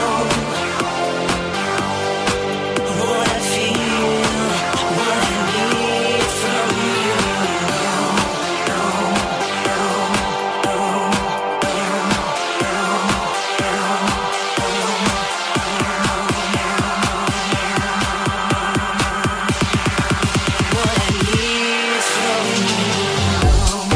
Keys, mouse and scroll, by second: 4.1-23.9 drag, 8.9 Tab, 9.8 middle click, 9.8 right click, 13.0 middle click, 13.0 right click, 14.4 middle click, 14.4 right click, 16.8 right click, 17.6 shift+middle click, 17.6 shift+right click, 18.7 middle click, 18.7 right click, 19.0 shift+middle click, 19.0 shift+right click, 19.6 m, 20.3 alt+z, 20.7 middle click, 20.7 right click, 21.1 shift+middle click, 21.1 shift+right click, 21.6 m, 22.3 middle click, 22.3 right click, 22.7 middle click, 22.7 right click, 23.0 middle click, 23.0 right click.